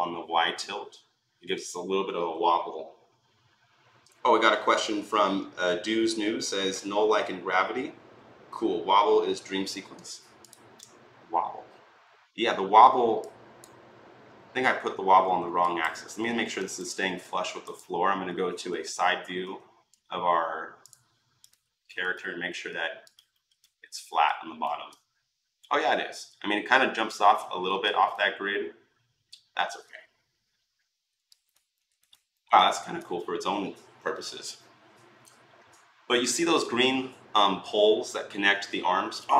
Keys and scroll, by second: 18.5 s, 19.2 s, 19.7 s.